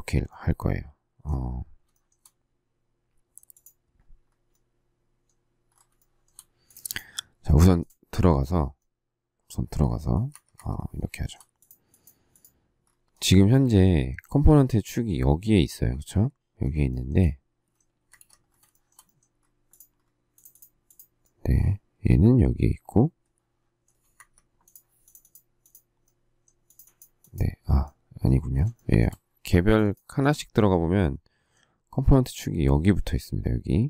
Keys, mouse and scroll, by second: 1.9 shift+middle click, 5.9 shift+middle click, 10.3 Escape, 10.5 Escape, 11.1 shift+middle click, 16.9 shift+middle click, 17.9 space, 18.1 Escape, 18.7 shift+middle click, 24.1 Escape, 28.7 shift+middle click.